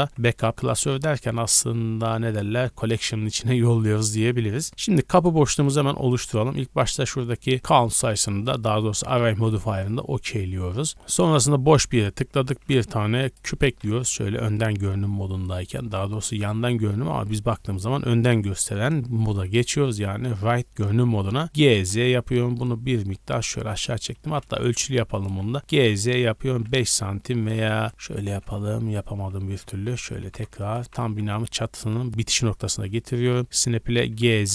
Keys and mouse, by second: 0.1-5.6 middle drag, 0.1 m, 5.6 click, 5.7-10.7 middle drag, 9.3 ctrl+a, 12.5 shift+a, 13.8 KP_1, 14.2 KP_3, 15.3-21.2 shift+middle drag, 21.4 g, 24.1 g, 25.6 g, 27.9 KP_1, 28.5 KP_3, 30.2 g, 30.7-32.1 drag, 30.8 g, 34.1 g.